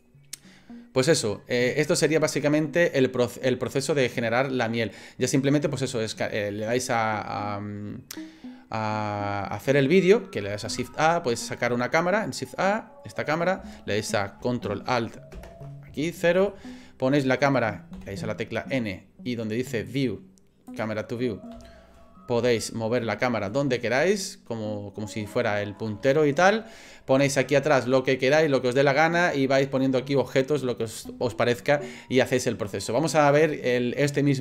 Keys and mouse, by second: 2.0 shift+click, 2.1 shift+middle click, 4.4 middle click, 5.0 click, 5.2-6.5 middle drag, 10.7 shift+a, 12.8 middle click, 15.3 ctrl+alt+KP_0, 16.5 shift+middle click, 16.9 shift+click, 17.0 shift+middle click, 18.0 n, 19.9 click, 20.7 click, 21.5 n, 22.6 shift+click, 22.7 shift+middle click, 23.5 shift+click, 23.8 ctrl+click, 24.3 ctrl+middle click, 24.5 ctrl+click, 24.6-25.8 ctrl+middle drag, 26.1 shift+middle click.